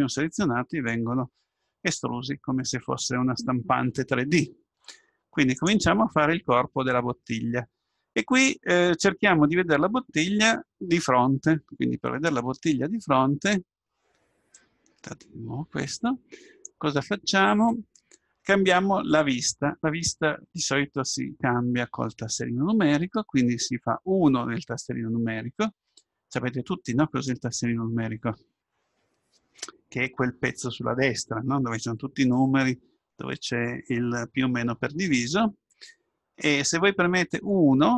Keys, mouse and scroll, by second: 6.7-9.9 middle drag.